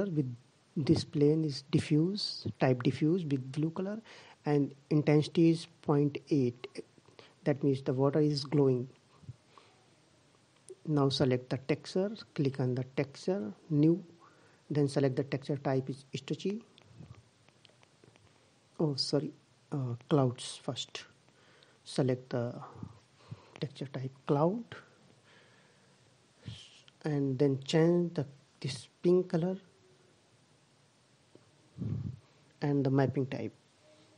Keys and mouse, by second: 9.6-11.1 drag, 11.5-13.3 drag, 14.3-15.6 drag, 23.0-27.5 middle drag, 27.5-29.1 drag.